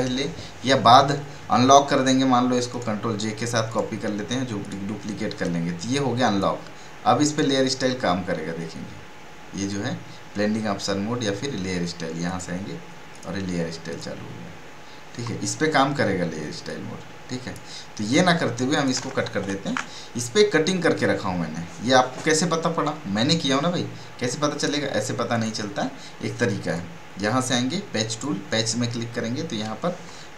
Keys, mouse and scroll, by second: 2.7 right click, 3.7-7.2 drag, 7.2 right click, 12.2 click, 16.6-18.0 drag, 24.6 click.